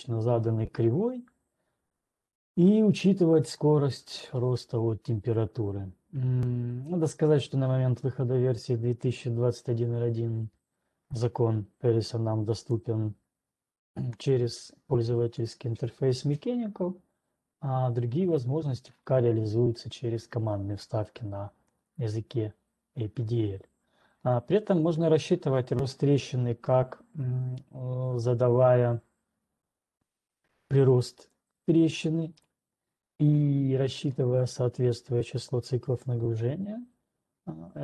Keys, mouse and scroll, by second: 14.3 click, 32.3 click, 34.7 scroll, 36.4 click.